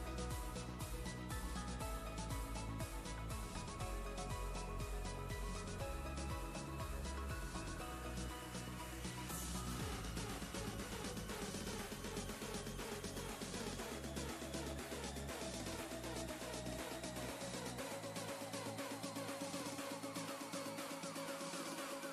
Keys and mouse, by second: 1.2 click, 2.3 right click, 5.7 click, 8.5 click, 9.2 ctrl+[, 14.8 click, 15.8 ctrl+space, 16.3 ctrl+click, 16.4-17.2 ctrl+space, 17.6 ctrl+space, 17.7-18.6 ctrl+click, 18.2 ctrl+space, 18.8-19.6 click, 19.4 space, 19.6 click, 21.5 ctrl+space, 21.9-22.1 ctrl+drag.